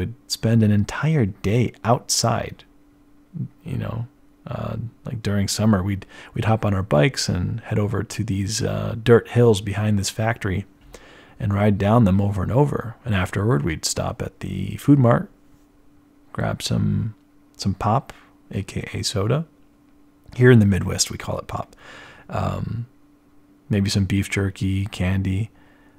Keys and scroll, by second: 3.2-6.9 typing.